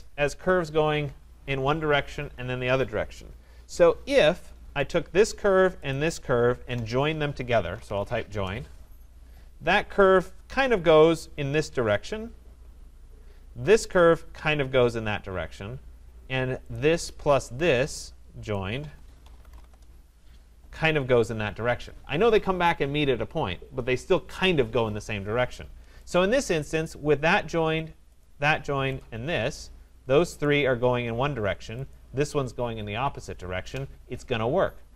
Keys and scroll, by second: 8.2 Return, 19.7 Return.